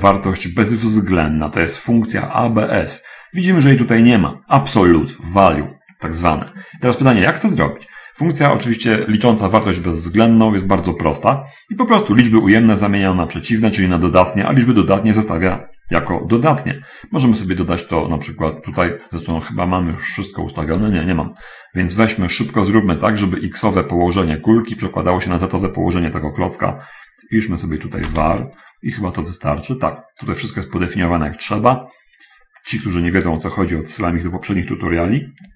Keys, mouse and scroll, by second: 12.2-14.4 drag, 14.8-17.3 drag, 19.2 middle click, 20.4-21.4 drag, 20.9 Escape, 21.8 right click, 26.8 middle click, 28.2 click, 28.3 v, 28.3 a, 28.3 r, 29.0 click, 29.4-29.7 scroll up 1, 30.2 middle click, 30.8 middle click, 32.5 middle click, 32.8-33.3 scroll up 1, 33.7 scroll up 2, 34.3-35.5 ctrl+middle drag.